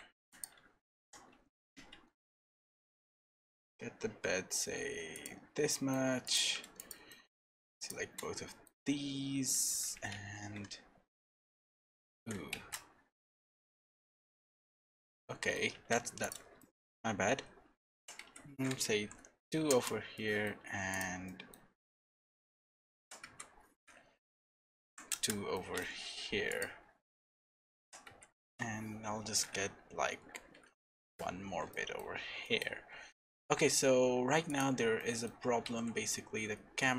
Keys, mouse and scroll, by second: 0.2 3, 0.3 click, 1.0 g, 5.4-5.7 scroll down 4, 5.7 middle click, 6.2 click, 7.1 middle click, 7.8 shift+click, 7.9 shift+click, 8.2 middle click, 9.3 s, 11.1 scroll up 1, 11.1 middle click, 12.2 s, 14.5 Tab, 15.2 middle click, 15.7 Tab, 16.2 click, 16.6 middle click, 18.0 g, 20.1 middle click, 20.9 click, 21.2 middle click, 23.0 g, 25.5 middle click, 26.5 click, 27.8 g, 31.4-32.0 scroll down 3, 31.7 middle click, 32.0 Tab, 32.4 middle click, 32.7-33.7 scroll down 2, 33.1 middle click, 34.5 click, 35.0 middle click, 35.6 g.